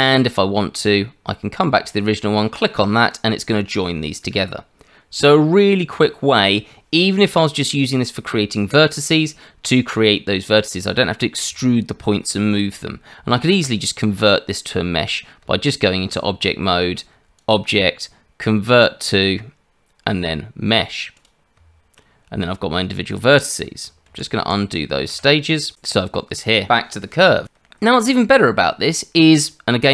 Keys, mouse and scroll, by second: 2.5 click, 15.4 Tab, 17.3 click, 21.5 Tab, 24.1 ctrl+z, 24.4 ctrl+z.